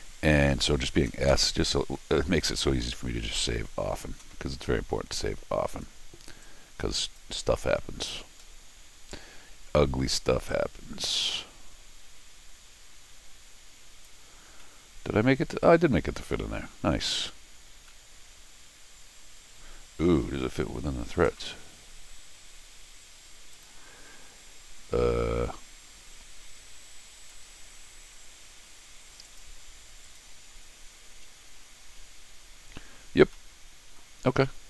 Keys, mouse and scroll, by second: 5.7 click, 6.4 click, 8.4-9.0 scroll down 2, 10.5-14.0 drag, 14.5-16.6 middle drag, 16.9 scroll down 4, 17.9-20.2 middle drag, 23.5 click, 27.2 click, 29.2 click, 30.0 click, 32.3-32.9 scroll up 2, 33.3 middle click, 34.3 scroll down 1, 34.5-34.6 middle drag.